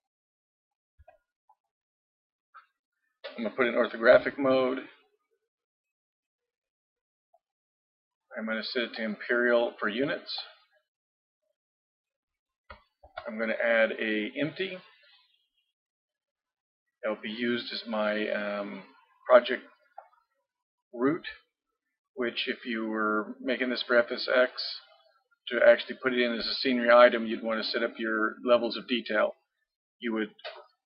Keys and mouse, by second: 1.0 x, 4.1 KP_5, 7.4-12.2 drag, 13.0 shift+a.